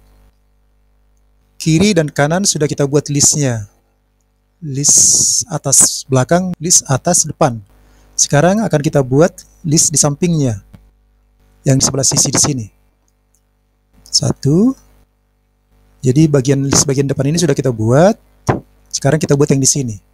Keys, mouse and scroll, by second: 1.1-2.3 scroll down 4, 13.7 middle click, 14.3 KP_1, 15.1-15.6 scroll down 4, 15.6 scroll up 1, 15.6-16.0 scroll down 1, 16.0 scroll up 3, 17.3-18.9 middle drag, 19.7 click.